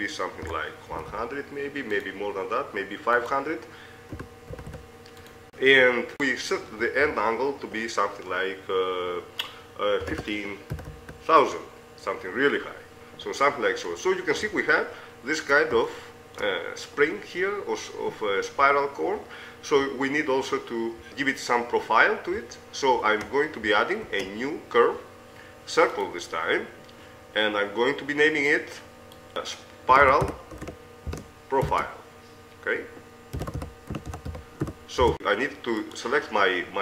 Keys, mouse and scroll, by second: 2.1 KP_0, 4.4 click, 4.9 KP_0, 5.7 click, 7.8 middle click, 11.0 KP_0, 11.4 KP_0, 13.5 click, 13.9 middle click, 15.3-18.1 middle drag, 21.1-23.6 drag, 24.4 shift+a, 28.8-30.2 drag, 36.2-36.8 right drag.